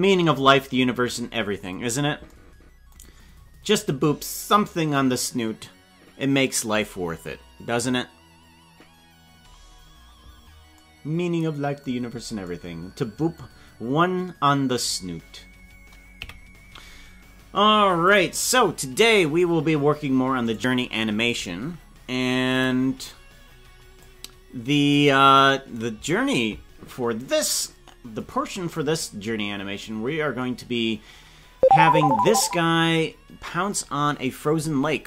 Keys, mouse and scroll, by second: 3.0-4.0 scroll down 15, 14.8 right click, 16.1 KP_Decimal, 18.1 click, 20.5-27.7 right drag, 28.5-29.0 scroll down 7, 32.2-35.0 right drag, 32.2 scroll down 1.